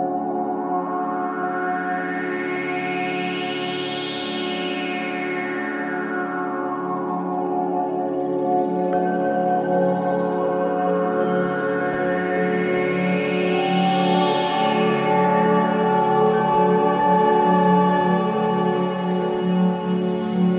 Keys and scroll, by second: 0.5 ctrl+z, 1.4 ctrl+z, 2.0 alt+v, 2.1 alt+s, 2.6 Escape, 4.5 ctrl+z, 5.0 alt+v, 5.1 alt+e, 8.5 ctrl+u, 10.1 Escape, 11.4 ctrl+z, 14.7 ctrl+z, 15.1 Escape, 16.9 ctrl+z, 17.8 Escape.